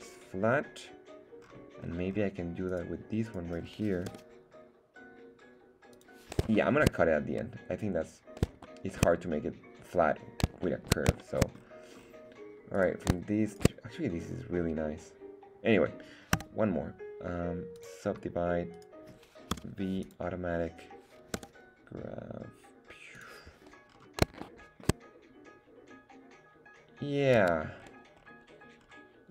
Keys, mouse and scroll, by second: 0.8-1.4 scroll down 1, 1.4 scroll up 1, 1.8 scroll down 2, 2.7 right click, 3.2 right click, 4.1 g, 5.9 click, 6.5 shift+middle click, 8.6 shift+middle click, 10.6 shift+middle click, 11.2 shift+middle click, 11.6-12.7 scroll down 4, 12.7 right click, 13.5 shift+right click, 16.3 w, 18.7 right click, 19.5 v, 21.3 g, 23.1 click, 24.0 scroll up 2, 24.4 shift+middle click, 27.4 Tab, 27.8-28.8 scroll down 4, 28.8-29.3 scroll up 1.